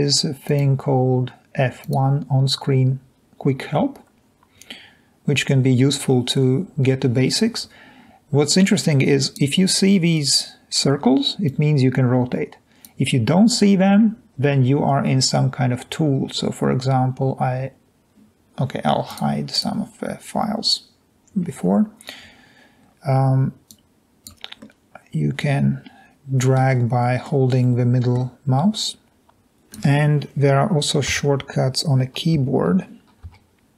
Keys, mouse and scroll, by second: 8.5 drag, 11.5-12.8 drag, 21.4 scroll down 1, 22.0 scroll down 1, 22.7 middle click, 22.7-23.2 scroll down 1, 23.2 click, 23.9 click, 24.6-26.5 middle drag, 27.4-28.2 middle drag, 29.3 click, 31.2 1, 32.5-33.7 typing.